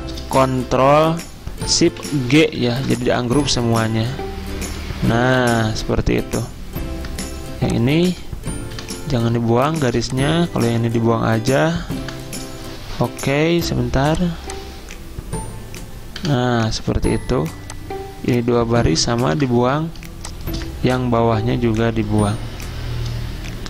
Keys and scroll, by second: 9.3 Delete, 9.8 Delete, 12.0 Delete, 13.1 ctrl+z, 16.2 Delete, 19.3 Delete.